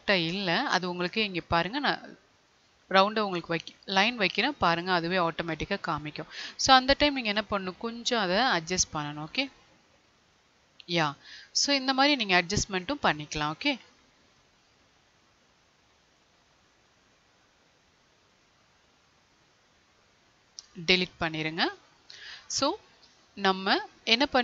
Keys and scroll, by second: 7.6 Right, 20.5 Delete.